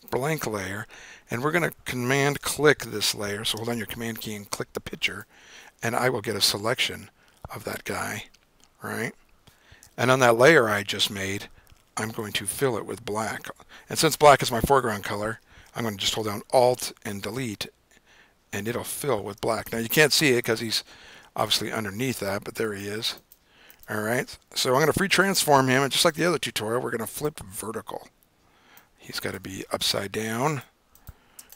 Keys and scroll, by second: 15.4 d, 17.4 alt+BackSpace, 20.0 super+d, 25.6 super+t.